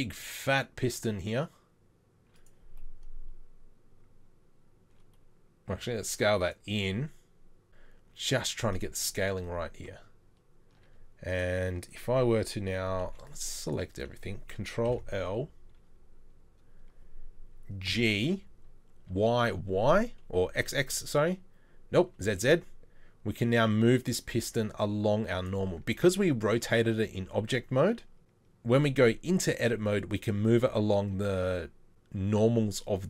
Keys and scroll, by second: 5.7 s, 10.8 Tab, 13.0 c, 14.9 ctrl+l, 17.9 g, 26.0 Tab, 28.9 Tab.